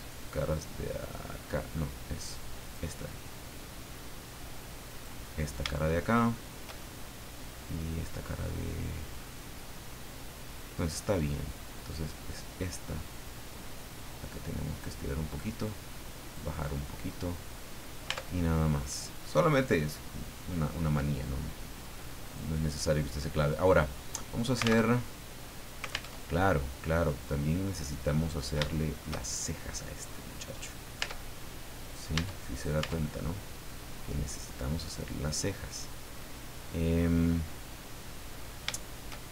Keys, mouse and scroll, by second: 0.0 right click, 1.0 right click, 2.6 click, 3.3-3.6 scroll up 2, 3.7 middle click, 4.9 right click, 5.8 shift+middle click, 6.8-8.0 shift+middle drag, 8.1-11.2 middle drag, 13.2-15.0 drag, 15.6 click, 16.6-18.1 middle drag, 18.4 Tab, 18.4-18.7 scroll down 1, 18.9 middle click, 19.8 scroll down 1, 20.1 middle click, 21.0-21.3 scroll up 1, 22.2 right click, 24.8 alt+Tab, 26.1 alt+Tab, 26.9 scroll down 2, 27.1-28.5 drag, 28.7 shift+middle click, 29.3 shift+middle click, 30.0-30.3 scroll up 2, 30.6 right click, 31.0 Tab, 31.8 right click, 32.1 Tab, 32.5 right click, 32.8 Tab, 33.7-37.2 middle drag, 37.4-38.6 middle drag, 38.7 shift+middle click.